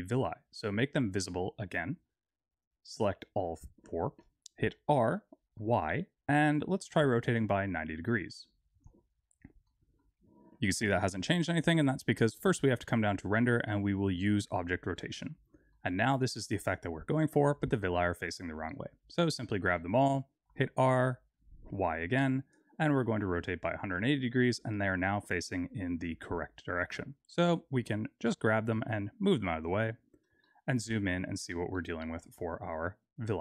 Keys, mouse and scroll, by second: 0.0-1.3 scroll down 2, 1.3 click, 1.9 shift+click, 2.5 click, 4.6 r, 9.6 middle click, 10.2-10.9 scroll up 4, 10.9 click, 12.1-13.1 scroll down 8, 14.4 click, 15.2 middle click, 17.6 click, 18.6 shift+click, 19.0 click, 20.4 r, 25.6-28.2 scroll down 2, 28.2 g, 30.0 scroll up 6, 30.4 shift+middle click, 31.1-31.7 scroll up 3, 31.7 shift+middle click, 32.5-33.4 scroll down 2.